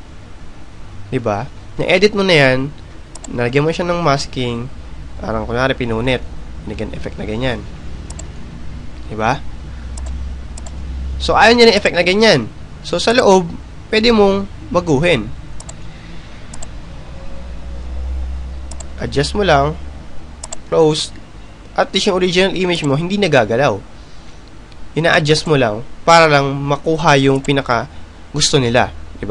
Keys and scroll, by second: 0.9 f, 1.1 e, 6.3 ].